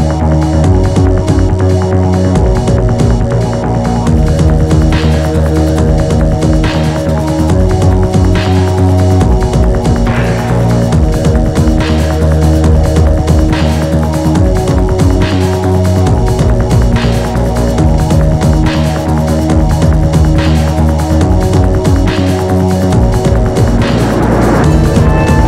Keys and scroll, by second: 0.9 p, 1.7 p, 3.2 p, 4.5 p, 6.1 p, 7.1 p, 8.6 p, 9.9 [, 11.6 p, 12.5 1, 15.5 ctrl+z, 24.7 ctrl+z.